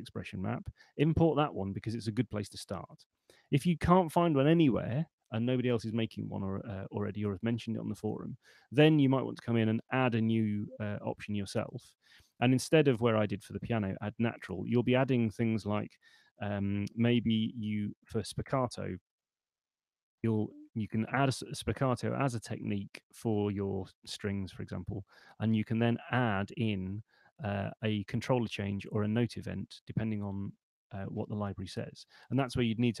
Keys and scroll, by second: 17.0-17.9 typing.